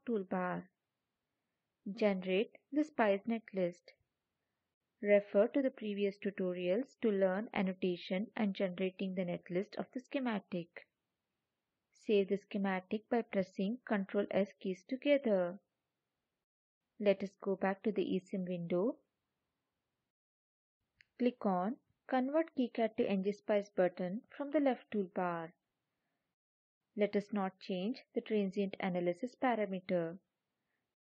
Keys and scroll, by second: 13.8 ctrl+s.